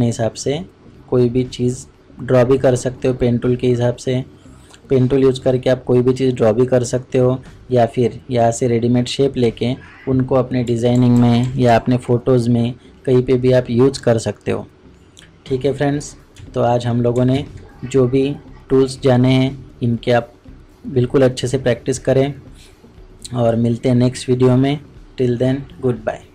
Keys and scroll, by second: 17.3 ctrl+shift+Tab.